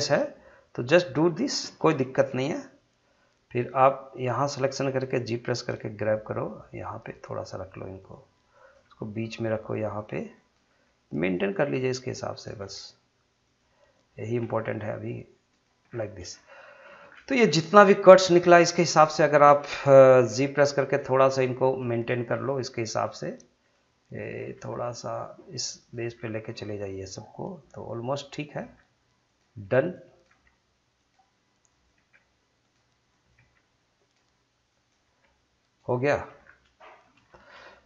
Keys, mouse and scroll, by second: 3.5 click, 4.7 g, 8.0 click, 8.8 g, 9.8 click, 10.7 g, 11.2 click, 12.5 g, 13.4 click, 14.4 g, 15.5 click, 15.9 scroll down 1, 16.3-16.8 scroll up 1, 17.1-17.6 shift+scroll down 2, 17.9 shift+middle click, 19.0 click, 20.3 g, 21.0 click, 21.8 g, 22.3 click, 23.1 g, 23.6 click, 24.5 g, 25.1 click, 26.0 g, 26.5 click, 28.6 g, 29.3 click, 30.5 g, 31.0 click, 31.9 g, 32.6 click, 33.4 g, 34.0 click, 35.0 g, 35.8 click, 36.1-36.4 scroll down 1, 36.8 shift+middle click, 37.2 scroll up 1, 37.7 shift+middle click.